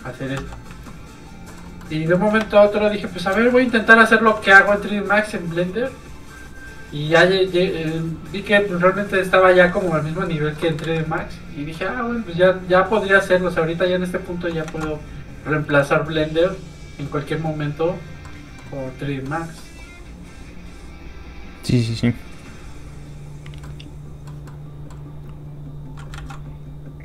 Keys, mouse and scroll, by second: 0.3 click, 0.4 f, 1.0 click, 1.5 middle click, 2.4 shift+space, 3.5 middle click, 3.6 middle click, 4.3 f, 4.5 click, 9.6 ctrl+z, 9.9 middle click, 10.0 middle click, 10.8 ctrl+z, 11.2 middle click, 11.3 middle click, 13.2 click, 14.7 ctrl+z, 15.4 click, 15.7 middle click, 16.6 click, 18.2 middle click, 18.8 f, 19.0 click, 19.2 middle click, 20.5 click, 23.6 middle click, 25.4 click, 26.1 ctrl+z, 26.6 click, 26.7 click.